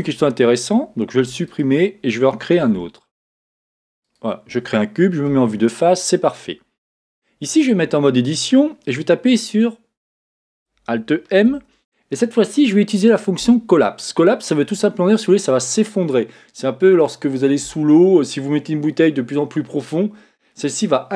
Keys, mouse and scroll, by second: 0.1 Tab, 1.2 x, 2.5 shift+a, 5.2 KP_1, 7.7 Tab.